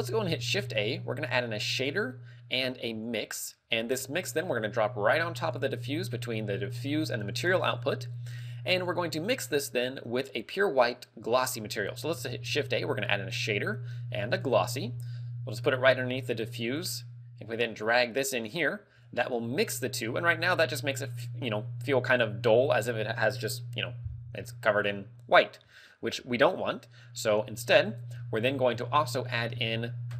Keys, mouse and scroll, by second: 0.5 shift+a, 3.9 g, 5.8 click, 8.2 click, 9.2-9.6 scroll down 4, 9.6 middle click, 12.6 shift+a, 15.0 g, 16.7 click, 17.6 click, 19.2 click, 24.5 middle click, 25.5 middle click, 27.8 scroll up 3, 28.0 middle click, 28.7 scroll down 3, 29.0 middle click.